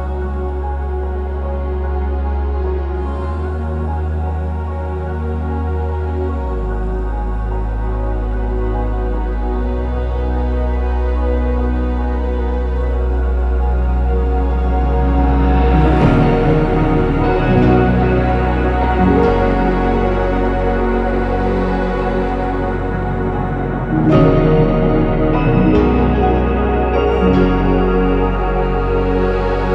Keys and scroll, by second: 0.1 Escape, 0.5-6.5 typing, 8.3-10.8 typing, 8.4 Return, 10.8 Escape, 11.7 ctrl+z, 11.8-12.7 typing, 15.8 ctrl+s, 17.2 ctrl+x, 17.7 ctrl+z, 18.1 ctrl+c, 18.1 ctrl+v, 19.5 ctrl+z, 19.9 BackSpace, 21.2 Escape, 25.4 ctrl+s, 28.5 typing, 28.6 Return.